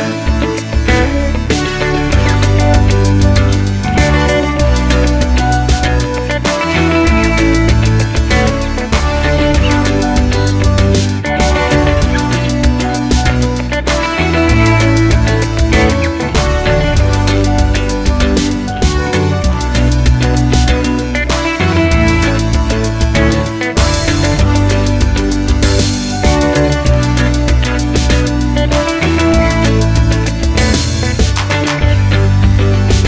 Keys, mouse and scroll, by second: 1.0 click, 1.0 s, 1.1-2.7 drag, 1.1 middle click, 2.7 middle click, 3.4 e, 3.8 click, 4.3 scroll, 4.8 a, 6.7-7.8 middle drag, 7.0 scroll, 7.6 3, 7.8 click, 8.3 z, 8.5 click, 9.5-10.9 middle drag, 10.2 i, 10.8 click, 10.9 2, 11.3 g, 12.0 3, 12.0 click, 16.2 middle click, 17.0 2, 17.0 click, 17.4-19.1 middle drag, 18.2 g, 19.1 e, 20.8-22.8 middle drag, 22.0 f, 22.6 i, 22.8 click, 23.4-24.6 middle drag, 23.9 ctrl+z, 24.5 3, 24.6 click, 25.0 e, 25.6 s, 25.8 i, 26.7-28.1 middle drag, 28.1 click, 28.3 alt+click, 28.9 i, 29.4-29.8 middle drag, 29.8 alt+e, 31.0 click, 31.2-33.0 middle drag.